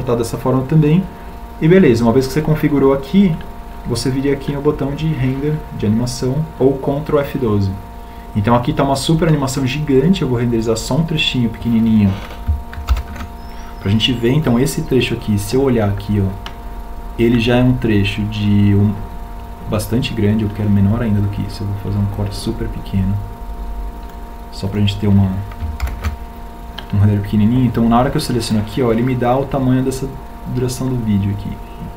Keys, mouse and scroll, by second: 12.1 ctrl+alt+shift+l, 25.8 ctrl+alt+shift+l.